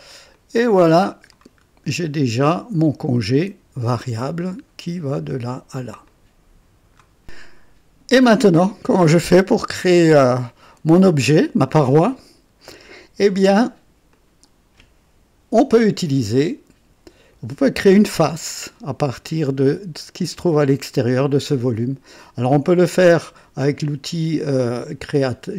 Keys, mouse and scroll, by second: 0.3-1.4 drag, 1.6 scroll up 1, 2.0 right click, 6.0 click, 9.2-11.5 drag, 11.6-13.0 drag, 14.1-16.3 drag, 22.8 click, 25.1 Escape.